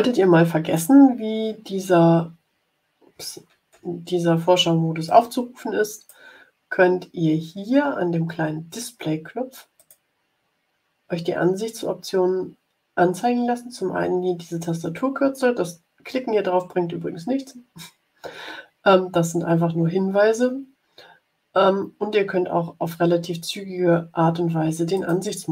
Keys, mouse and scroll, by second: 0.0 click, 1.4-2.2 scroll up 2, 2.9 scroll up 2, 3.8 ctrl+scroll up 2, 5.0-6.2 drag, 9.7 click, 24.9 click.